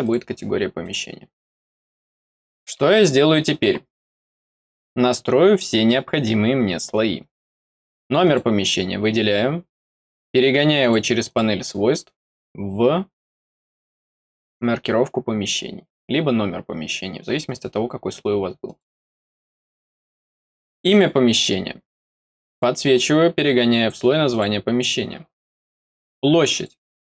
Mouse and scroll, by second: 0.7 click, 2.0 middle click, 6.2 middle click, 7.6 click, 8.1 click, 10.7 click, 11.2 click, 18.6 click, 20.1 middle click, 20.8 click, 22.4 click, 22.8 click, 24.2 click, 25.3 middle click, 26.5 click.